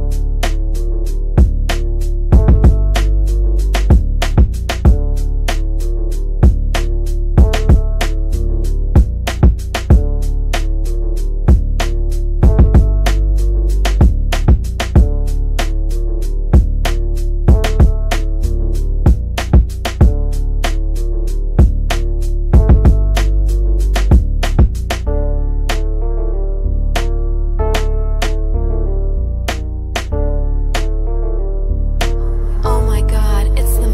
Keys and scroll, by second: 18.3 c, 23.9 Delete, 29.2 c.